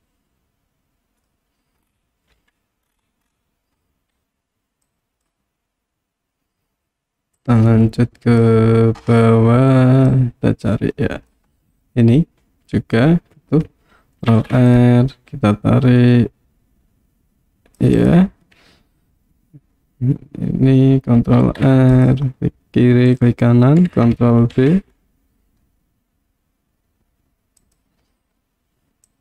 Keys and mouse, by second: 0.0-1.3 middle drag, 2.4 KP_1, 4.9 click, 7.5-8.6 drag, 10.1-11.4 drag, 14.4 ctrl+r, 18.0 click, 21.4 ctrl+r, 23.2 right click, 24.6 ctrl+b, 27.7 click, 29.1 click.